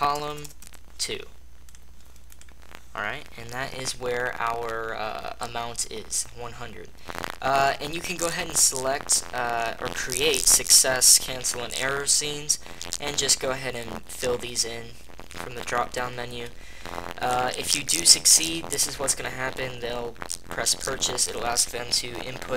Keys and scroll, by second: 0.0 BackSpace, 0.2 BackSpace.